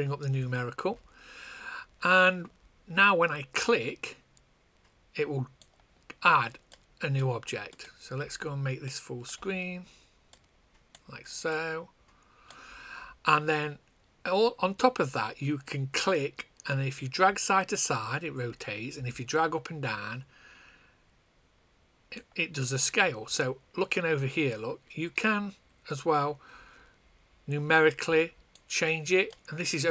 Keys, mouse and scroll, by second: 3.8 click, 6.9 click, 10.2 click, 25.8 click, 29.2 click.